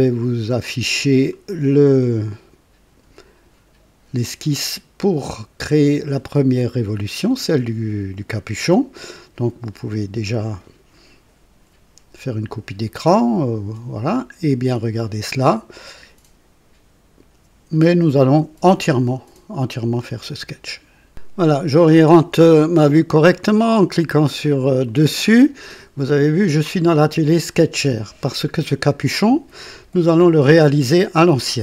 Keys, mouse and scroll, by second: 0.5 click, 24.9 click.